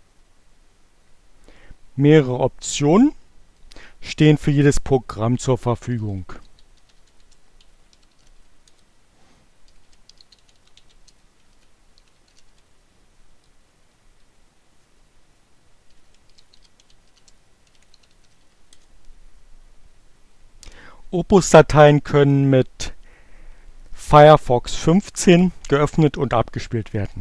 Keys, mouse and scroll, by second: 4.7-12.2 typing, 12.7 Return, 14.8-18.6 typing.